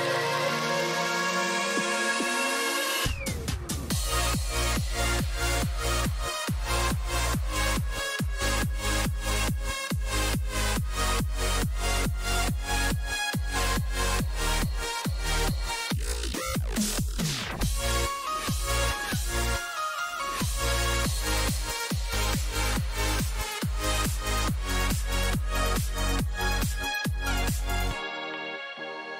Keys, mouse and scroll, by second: 15.2-29.1 middle drag.